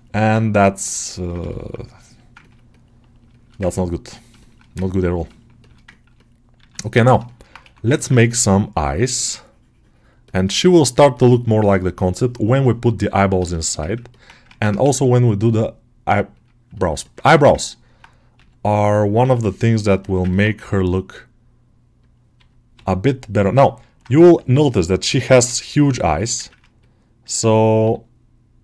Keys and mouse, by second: 0.4-1.4 ctrl+right drag, 1.4 alt+shift+middle click, 1.7 middle click, 2.3 ctrl+alt+middle click, 2.6 alt+middle click, 3.2 alt+shift+middle click, 3.5 ctrl+alt+middle click, 3.9 middle click, 4.3 alt+shift+middle click, 4.7 ctrl+alt+middle click, 5.1 middle click, 5.5 alt+shift+middle click, 5.8 ctrl+alt+middle click, 6.0 middle click, 6.5 alt+q, 6.8 ctrl+middle click, 7.1 shift+middle click, 7.5 1, 7.9 ctrl+alt+middle click, 10.1-13.5 ctrl+drag, 13.5 shift+middle click, 13.7 ctrl+middle click, 14.3 ctrl+Tab, 14.7 shift+a, 16.6 ctrl+middle click, 16.9 alt+middle click, 17.1 Tab, 17.4 ctrl+alt+middle click, 18.2 s, 18.8 click, 19.0 g, 19.6 middle click, 19.9 alt+shift+middle click, 20.1 ctrl+middle click, 22.6 g, 23.2 middle click, 26.0 ctrl+alt+middle click, 26.3 ctrl+middle click, 26.6 middle click, 27.6 g.